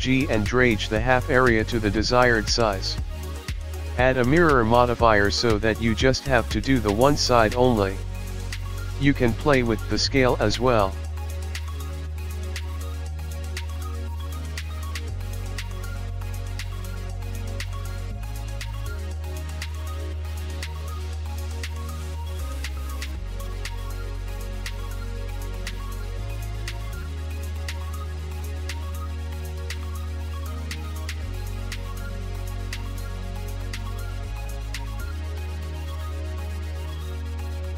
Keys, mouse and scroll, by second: 1.3 scroll up 4, 2.2 g, 2.6 click, 2.8 click, 3.7 click, 4.1 click, 4.4 scroll down 5, 4.6 middle click, 5.0 KP_1, 5.4 g, 8.8 click, 10.0 shift+l, 10.1 click, 10.2 shift+d, 11.7 r, 13.0 r, 13.3 g, 14.3 click, 14.4 scroll down 3, 14.5 scroll up 1, 14.8 r, 15.3 l, 15.5 r, 17.5 g, 18.9 click, 19.5 l, 21.4 click, 21.4 g, 22.2 r, 22.5 l, 23.9 g, 24.5 click, 24.6 scroll down 1, 24.8 KP_1, 25.0 scroll up 2, 25.5 click, 26.0 Delete, 27.2 click, 27.9 click, 28.3 Tab, 28.3 click, 29.0 click, 29.3-29.6 scroll down 8, 29.5 scroll up 5, 29.8 scroll down 2, 30.0-30.4 scroll up 4, 30.3 click, 31.4 Tab, 31.9 l, 32.1 g, 32.8 click, 32.9 scroll down 5, 33.1-33.7 scroll up 7, 33.8-34.4 scroll down 1, 34.8 middle click, 35.7 KP_1, 37.4 shift+a.